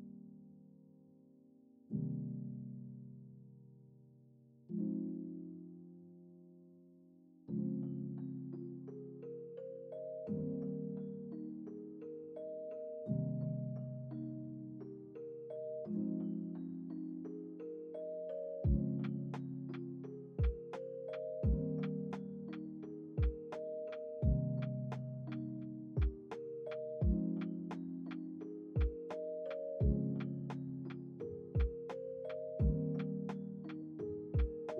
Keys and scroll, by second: 6.5 z, 8.9 x, 15.7 ctrl+c, 16.0 ctrl+v, 24.3 ctrl+s, 28.2 z, 31.4 ctrl+c, 31.7 ctrl+v.